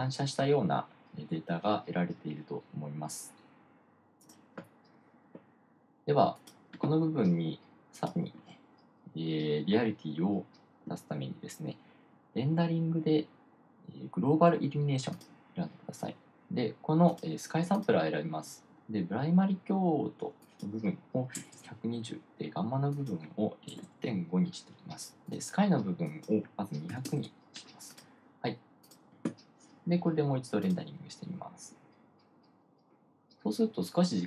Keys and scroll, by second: 21.6-22.5 typing, 24.0-24.9 typing, 27.2-28.1 typing.